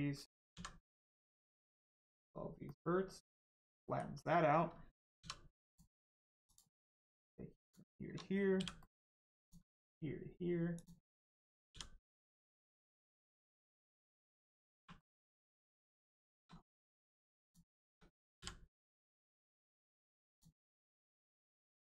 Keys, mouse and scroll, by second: 0.5 x, 1.8 click, 2.6 middle click, 3.4 shift+middle click, 3.8 middle click, 3.8 middle click, 5.6 click, 7.6 shift+click, 8.5 f, 8.8 middle click, 9.4 click, 10.7 shift+click, 11.6 f, 12.4 middle click, 13.2 shift+middle click, 13.4 middle click, 13.8-14.7 scroll up 1, 14.7 1, 14.9 middle click, 15.4-15.9 scroll up 1, 16.1 shift+middle click, 16.5 scroll up 1, 17.4 shift+click, 18.3 m, 19.2 click, 20.8 middle click, 21.3-21.9 scroll up 1.